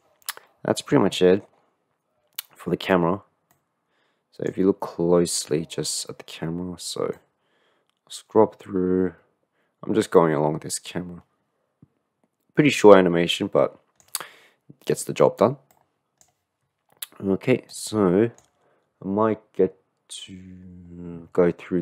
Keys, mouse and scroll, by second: 1.0-1.8 middle drag, 3.6-4.7 drag, 5.2 middle click, 7.2-8.4 drag, 9.6 click, 12.9 click, 15.8 click, 17.8 click.